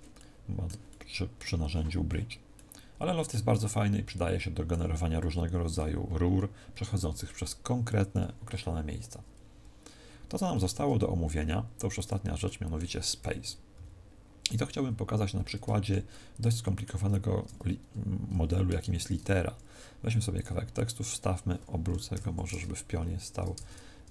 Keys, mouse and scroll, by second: 0.1 middle click, 0.8 middle click, 10.4 Tab, 11.0 x, 12.3 middle click, 13.2 KP_1, 13.6 KP_5, 14.7 KP_5, 16.0 shift+middle click, 18.9 shift+a, 23.2 Tab, 23.5 BackSpace, 23.8 BackSpace.